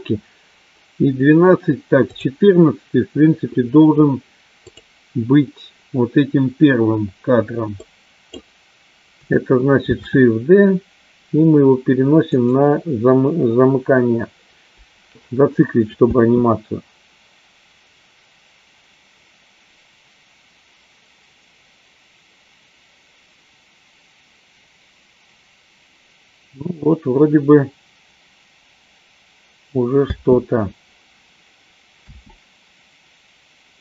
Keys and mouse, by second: 2.7 click, 5.3 click, 7.9 click, 10.3 shift+d, 16.2 space, 31.1 space.